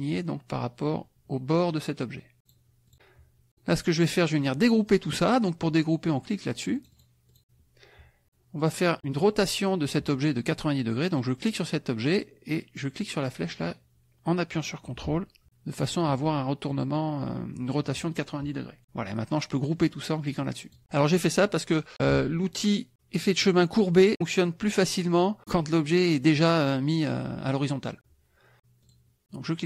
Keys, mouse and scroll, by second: 2.4 click, 2.8 click, 6.8 click, 7.3 click, 11.5 click, 13.6-16.0 drag, 20.6 click, 28.8 click.